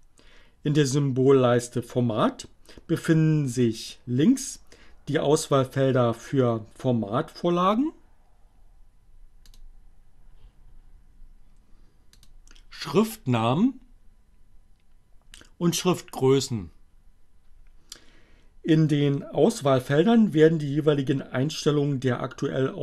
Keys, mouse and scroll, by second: 9.4 click, 11.7 click.